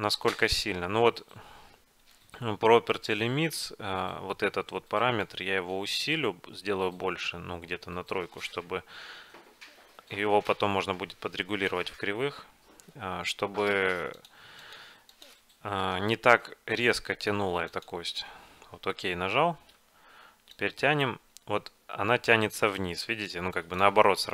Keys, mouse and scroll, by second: 19.0-20.6 middle drag, 20.6-22.4 drag.